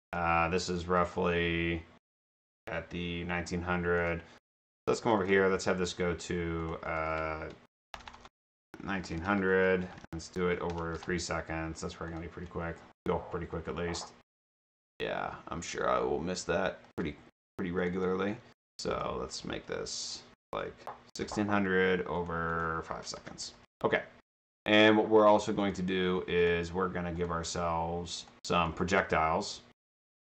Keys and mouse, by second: 0.1 click, 4.0 click, 5.1 click, 5.2 click, 6.6 click, 6.9 click, 8.0 BackSpace, 9.6 Tab, 10.7 BackSpace, 11.0 Return, 12.1 click, 16.9 click, 18.9 click, 22.2 click, 22.5 click, 23.2 BackSpace, 23.6 Return, 24.3 click, 26.5 click, 27.6 click, 28.6 click, 29.9 click.